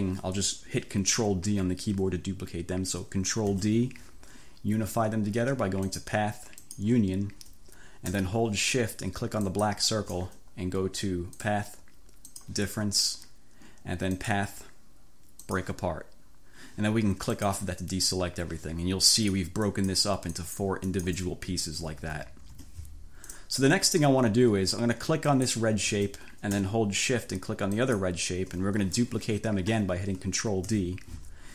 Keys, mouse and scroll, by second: 3.5 ctrl+d, 5.9 click, 6.6 click, 9.5 shift+click, 11.5 click, 12.3 click, 14.3 click, 15.5 click, 17.4 click, 19.2 click, 19.8 click, 20.5 click, 21.0 click, 21.8 ctrl+z, 23.3 click, 25.4 click, 27.8 shift+click, 30.7 ctrl+d.